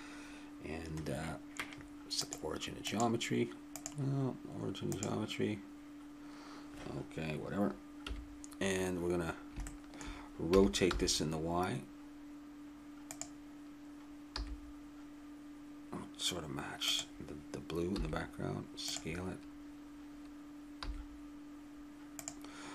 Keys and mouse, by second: 2.2-5.6 drag, 8.0 KP_1, 9.0 middle click, 10.5 middle click, 10.5 r, 14.3 g, 18.0 s, 20.8 g.